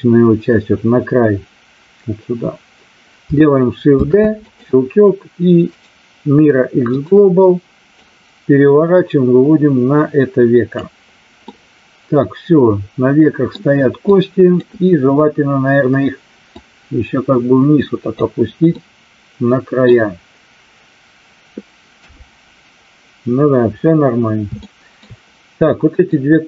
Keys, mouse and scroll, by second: 3.8 shift+d, 4.4 click, 5.7-7.1 right drag, 8.0-10.7 drag, 11.4-13.6 middle drag, 14.2 click, 16.4-18.1 drag, 18.7-20.0 middle drag, 22.0 KP_3, 24.6 shift+middle click, 25.6 click.